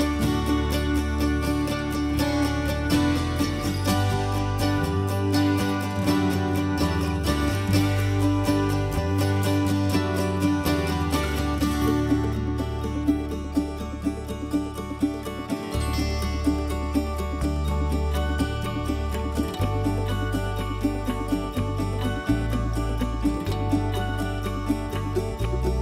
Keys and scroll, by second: 3.7 m, 8.1-8.4 scroll, 16.0 Escape, 16.1 Escape, 16.2 Escape, 17.5 ctrl+a, 18.1 ctrl+h, 21.8-25.7 typing.